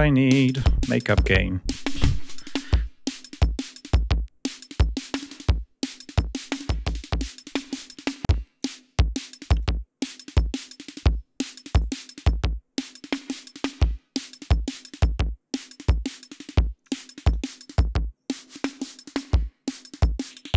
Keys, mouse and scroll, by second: 2.9-8.9 drag, 9.7 click, 12.1-14.6 drag, 14.9-17.1 drag, 17.4-18.7 drag, 18.8-20.5 drag.